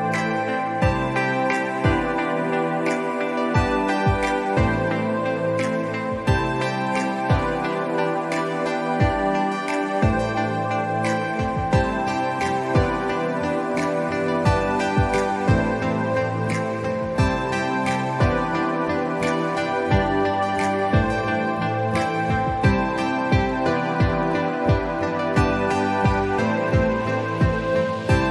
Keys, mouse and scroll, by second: 0.0 alt+scroll up 1, 0.7 ctrl+z, 3.9 click, 10.7-11.1 alt+scroll down 1, 11.3 alt+scroll up 1, 12.0 ctrl+z, 14.6 click, 15.0 scroll up 1, 15.1 scroll down 1, 15.6-16.2 alt+scroll up 1, 16.2-16.6 alt+scroll down 2, 16.6 scroll up 1, 17.0 scroll down 1, 17.2 alt+scroll up 1, 17.8-22.8 drag, 23.9 scroll up 1, 24.1-28.3 drag.